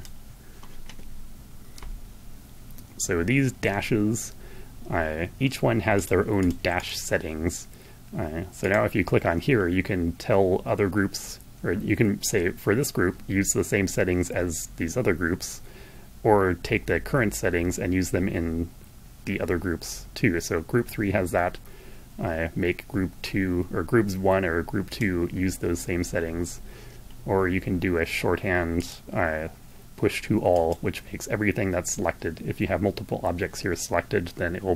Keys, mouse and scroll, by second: 5.0 click, 5.5 click, 5.9 click, 7.7 click, 22.4-24.3 drag, 27.8 click, 29.1 click.